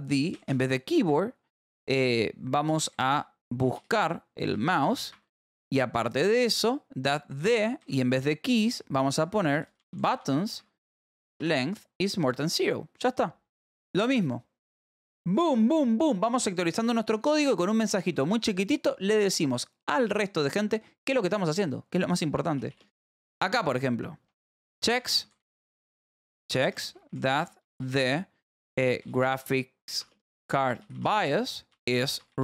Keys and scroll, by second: 0.4 k, 0.8 v, 1.7 Escape, 2.8-5.3 typing, 7.5-10.8 typing, 11.8 ctrl+s, 14.1 j, 14.5 k, 17.3 h, 17.8 j, 21.0 o, 22.5 /, 22.8 space, 24.2-32.4 typing.